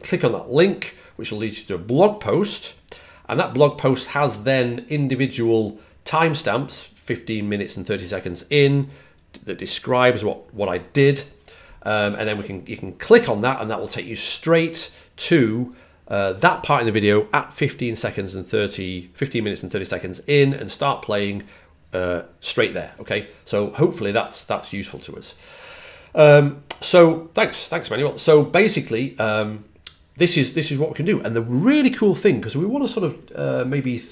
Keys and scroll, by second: 0.5 typing, 2.3 typing, 5.1-5.9 typing, 22.3-23.1 typing.